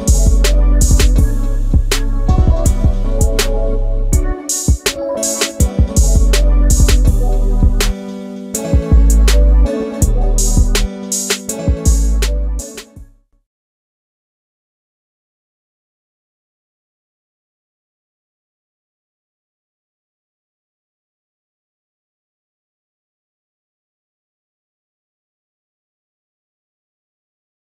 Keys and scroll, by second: 1.4 ctrl+space, 2.7 m, 5.2 space, 7.2 shift+m, 10.6 ctrl+space, 12.8 m, 18.6 a, 21.3 shift+space.